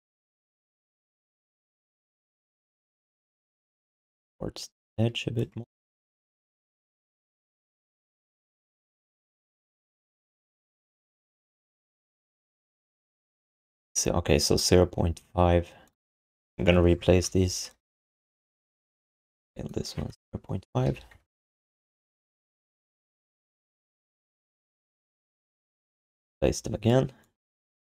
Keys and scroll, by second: 6.6 q, 18.1 r, 20.8 ..